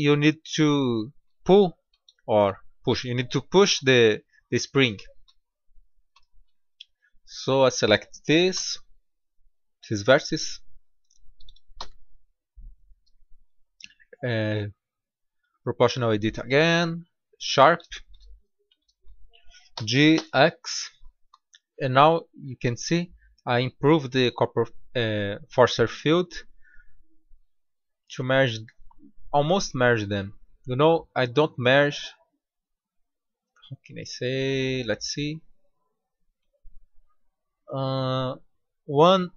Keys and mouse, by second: 1.1-1.7 middle drag, 3.8 Tab, 7.3-9.1 drag, 8.4 b, 10.7-12.5 drag, 11.7 b, 13.4-15.2 drag, 15.3-17.8 drag, 17.8 middle click, 19.6 g.